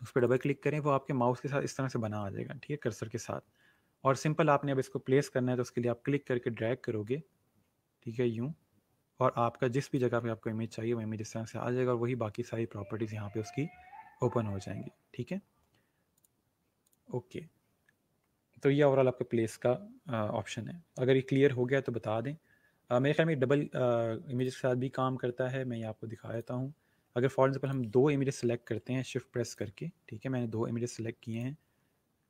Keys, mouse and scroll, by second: 0.1 click, 7.0 click, 16.1 click, 24.3 click, 26.3 click, 29.4 ctrl+alt+click.